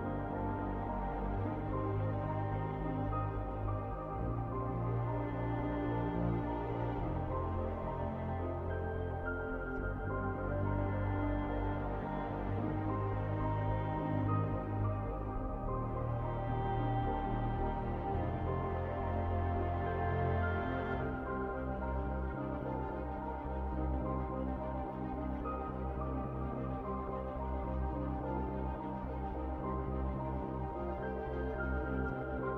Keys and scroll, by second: 8.3-9.8 typing, 15.1-17.1 typing, 18.1-20.6 typing, 28.2-32.5 typing.